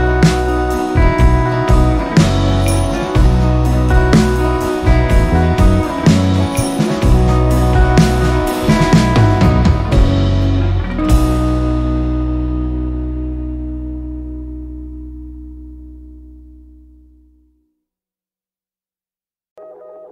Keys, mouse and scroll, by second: 1.3 click, 1.8 ctrl+scroll up 1, 3.8 r, 4.9-11.7 drag, 11.7 ctrl+z, 12.7 click, 13.4 ctrl+scroll up 1, 14.1 click, 16.9-17.7 typing, 18.8 click.